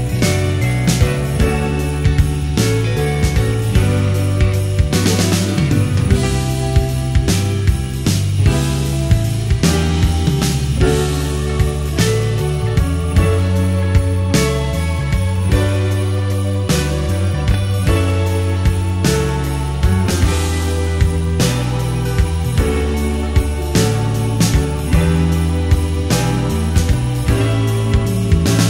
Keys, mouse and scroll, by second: 0.7 click, 1.4-5.1 drag, 7.3-9.0 middle drag, 10.4-22.9 drag, 25.8-28.6 drag.